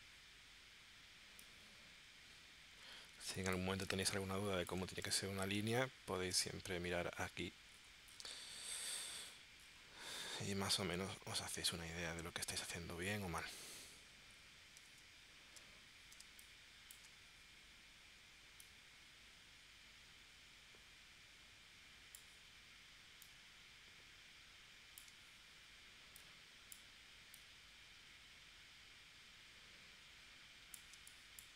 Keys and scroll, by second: 3.9 space, 5.6 super+Tab, 14.9 super+Tab, 16.2 space, 30.9 space.